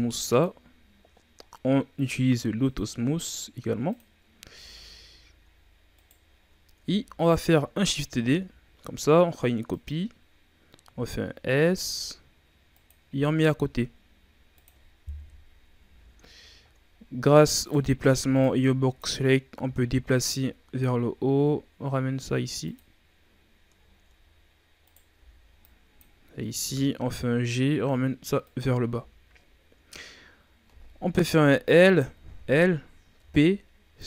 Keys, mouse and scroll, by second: 1.3-2.6 scroll down 4, 2.6 click, 2.9-3.8 scroll down 6, 3.8 click, 4.5 a, 4.6-5.5 scroll down 5, 5.5-5.9 scroll up 4, 5.9 right click, 6.2 shift+scroll down 1, 6.7 Tab, 8.2 shift+d, 10.8 s, 13.0 g, 15.1 KP_3, 15.8 z, 16.5-17.5 shift+scroll up 5, 17.5 right click, 18.1 b, 19.5 g, 23.4-24.1 scroll down 6, 24.1 scroll up 2, 24.7 right click, 25.1 b, 26.6 g, 28.8 z, 29.3-30.0 scroll down 4, 30.0 scroll up 2, 31.3 l, 31.8 right click, 32.1 l, 33.1 p.